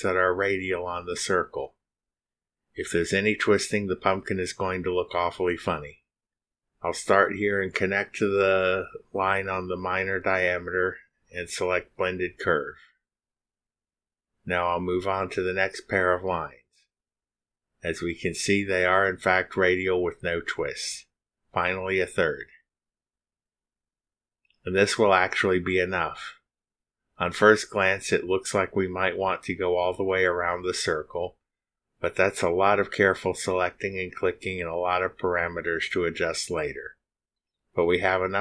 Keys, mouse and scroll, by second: 6.8 ctrl+click, 12.1 click, 15.7 click, 18.8 ctrl+click, 20.6 click, 22.8 click, 25.0 ctrl+click, 27.7 click.